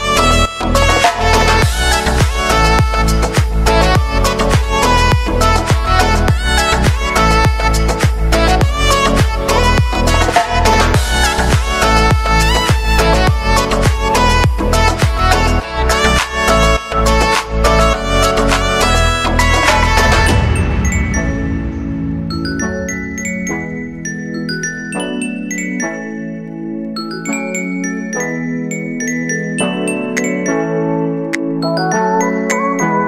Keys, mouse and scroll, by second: 0.3 ctrl+shift+c, 1.4 Return, 3.3 ctrl+d, 4.3-7.2 drag, 7.2 s, 7.8 click, 10.2 -, 10.6 Return, 12.9-16.0 drag, 16.0-16.5 alt+scroll up 1, 17.2 click, 17.6 space, 19.4 click, 21.3 space, 23.0 click, 26.6 space, 29.2 space, 29.7-33.0 drag.